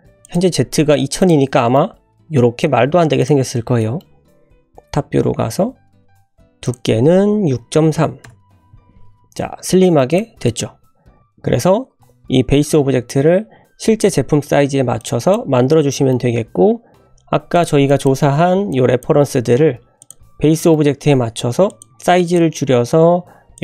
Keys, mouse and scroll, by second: 1.2 click, 1.8-2.6 middle drag, 3.2 click, 3.8 middle drag, 4.1 `, 6.6-9.0 drag, 9.4-10.0 middle drag, 10.1 click, 10.5 click, 11.1 `, 11.2-11.8 scroll down 3, 15.0-15.4 drag, 15.9 shift+middle drag, 17.5 click, 17.9 drag, 18.3 Delete, 18.7-19.1 drag, 19.5 g, 20.2 scroll up 1, 20.6 shift+middle drag, 21.0 s, 21.9 g, 22.5-23.2 scroll up 5, 23.2 s.